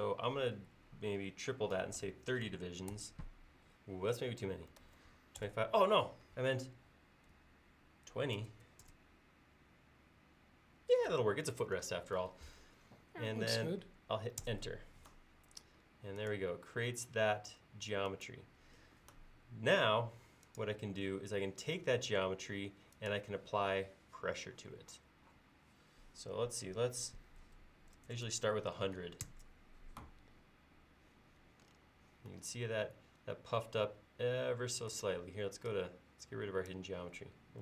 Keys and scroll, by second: 1.7-2.5 typing, 4.6-5.4 typing, 5.5 Return, 8.2-8.5 typing, 8.9 Return, 14.5 Return, 19.9 space, 27.5-28.2 typing, 29.3 Return.